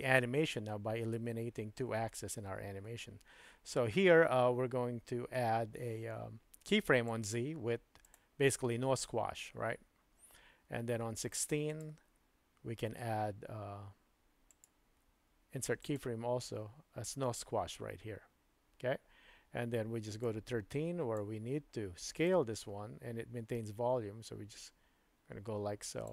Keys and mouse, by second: 7.2-8.2 right drag, 11.7 click, 14.5-16.0 right drag, 20.2-21.3 drag, 22.2-26.0 drag.